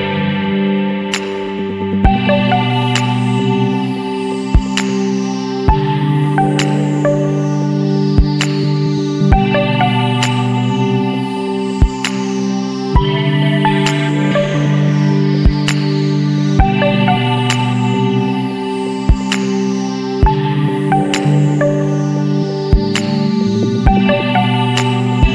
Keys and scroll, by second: 2.6 ctrl+z, 3.1 space, 3.8 ctrl+alt+z, 5.9 space, 6.1 ctrl+=, 6.5 Delete, 6.8 space, 7.4 ctrl+=, 8.6 ctrl+z, 9.0 space, 9.6 space, 10.5 space, 11.3 space, 11.7 Down, 12.0 Left, 12.5 space, 13.2 space, 14.6 Down, 15.5 space, 16.5 ctrl+z, 17.5 Delete, 17.7 space, 17.9 ctrl+=, 20.0 ctrl+x, 20.1 ctrl+alt+z, 21.6 space, 23.2 space, 24.9 space.